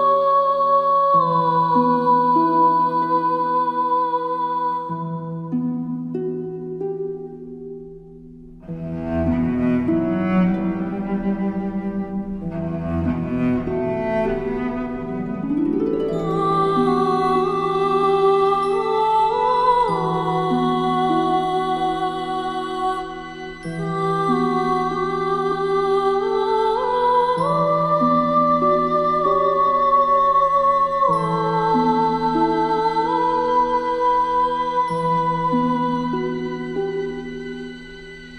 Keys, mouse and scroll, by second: 6.3 alt+scroll down 1, 6.5 space, 6.7 click, 7.0 space, 8.1 click, 9.7 space, 9.8 click, 11.0 space, 11.3 click, 11.4 space, 11.6 click, 16.7 click, 22.2-33.9 drag.